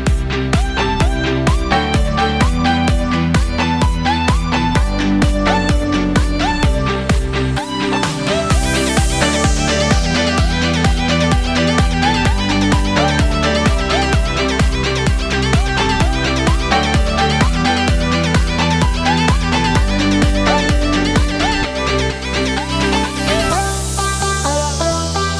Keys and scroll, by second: 24.8 ctrl+z.